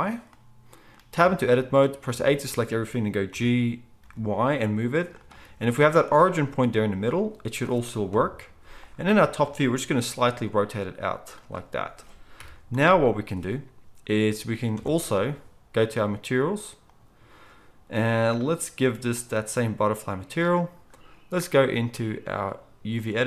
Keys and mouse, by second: 1.1 Tab, 2.1 a, 3.3 g, 8.1 KP_7, 10.0 r, 12.3 KP_1, 14.7 Tab.